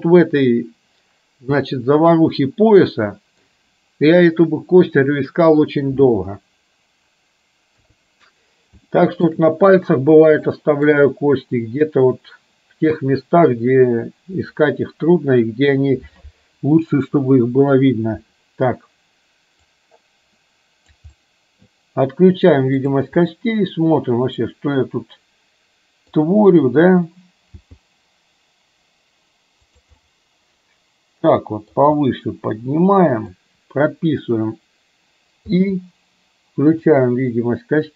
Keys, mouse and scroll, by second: 1.8-3.5 middle drag, 7.8 KP_3, 9.0 middle drag, 10.5-10.9 shift+middle drag, 19.9-21.1 drag, 21.3 middle click, 22.9 click, 23.3 scroll up 1, 23.4-26.3 middle drag, 27.6 g, 30.0 scroll up 1, 30.1-31.8 middle drag, 32.1-33.4 middle drag.